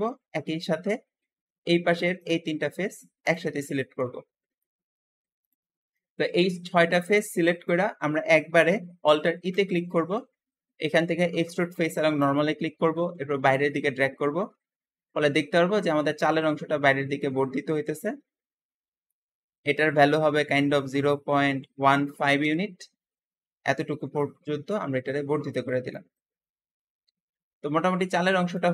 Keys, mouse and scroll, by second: 1.4-2.0 scroll up 1, 2.0 shift+click, 3.1 shift+click, 3.5-5.3 shift+middle drag, 5.3 shift+click, 5.7 scroll down 2, 5.9 alt+z, 5.9-7.8 alt+middle drag, 7.8-8.5 scroll up 1, 9.3 alt+e, 16.0-19.1 middle drag, 19.9-23.0 drag, 20.6-21.8 typing, 22.3 Return, 22.4 Return, 23.4-23.7 scroll down 1, 23.7 Tab, 23.8 Tab, 24.0-26.6 middle drag, 26.6-27.0 scroll down 3, 27.0-28.7 middle drag.